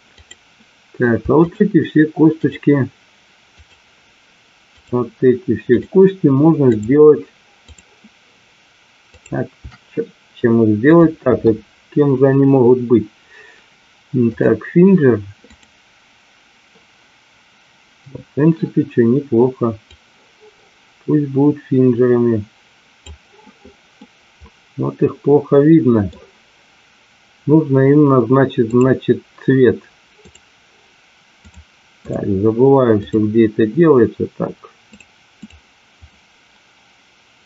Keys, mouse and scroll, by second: 0.2 click, 1.4 shift+click, 2.4 shift+click, 3.5 shift+click, 4.7 shift+click, 5.7 shift+click, 6.6 shift+click, 7.7 shift+click, 9.1 shift+click, 10.7-14.5 drag, 15.5 click, 19.9-23.0 drag, 24.0-26.1 middle drag, 28.6 click, 30.2 click, 31.4 click, 32.0 click, 33.1 click, 34.8 click, 36.0 click.